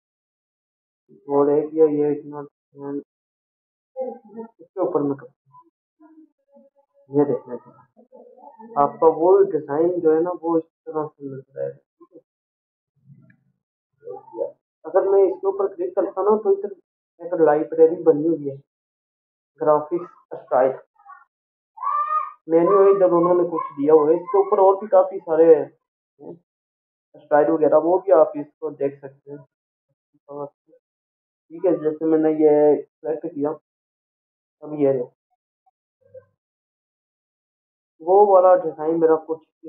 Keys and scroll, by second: 2.1 ctrl+a, 14.5 ctrl+a.